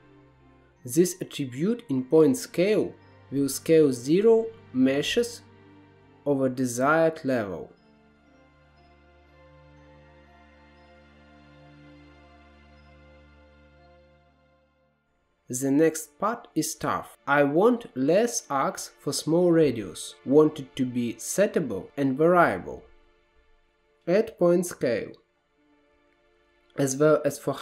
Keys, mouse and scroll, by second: 2.5-4.4 drag, 4.7-6.2 drag, 9.0 scroll up 1, 9.2-10.0 scroll down 1, 10.0 scroll down 6, 10.2 middle click, 10.4 click, 10.5 shift+a, 11.8-12.3 drag, 12.3 middle click, 12.5 click, 12.9-13.3 middle drag, 13.3-13.7 drag, 13.7 right click, 14.4 scroll up 5, 14.5 middle click, 14.8 click, 14.9-15.8 scroll down 6, 15.8-17.0 drag, 17.0-18.5 middle drag, 18.5-19.4 scroll up 5, 19.4 middle click, 20.0-20.4 scroll down 4, 20.4-20.9 middle drag, 20.9-23.0 drag, 23.1 shift+a, 24.0 scroll up 1, 24.2 middle click, 24.5-25.8 drag, 26.9-27.6 drag.